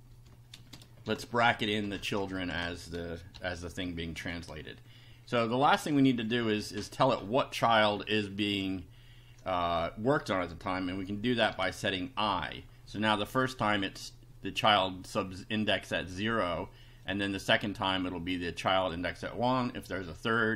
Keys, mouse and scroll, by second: 0.1 shift+0, 0.5 shift+space, 1.1 shift+[, 1.5 shift+Down, 1.9 shift+Home, 2.0 shift+Tab, 2.2 shift+End, 2.5 shift+Return, 3.3 shift+], 4.2 Up, 5.7 Right, 8.0 Right, 11.5 i, 13.4 click, 14.7 click, 17.1 click, 18.3 click, 20.1 click.